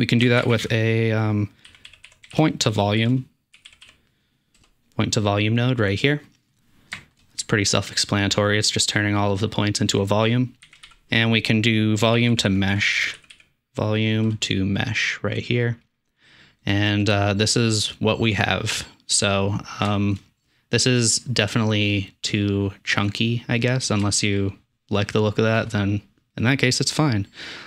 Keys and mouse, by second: 0.4 shift+a, 9.8 click, 10.7 shift+a, 15.9 typing, 16.7 middle drag, 19.7-20.3 shift+middle drag, 23.8-24.2 middle drag.